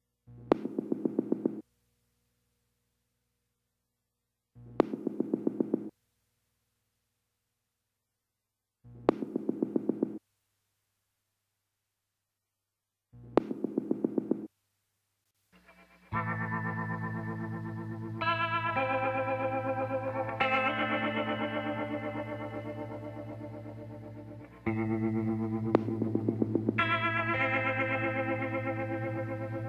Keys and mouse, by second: 0.4-1.9 drag, 3.5-4.7 middle drag, 4.7-8.0 drag, 8.2-9.5 middle drag, 8.9 KP_Divide, 10.5 KP_Decimal, 10.9 middle click, 13.6-17.7 middle drag, 17.7-19.4 drag, 19.4 middle click, 19.9-23.1 drag, 24.9-27.5 drag, 28.5-29.6 drag.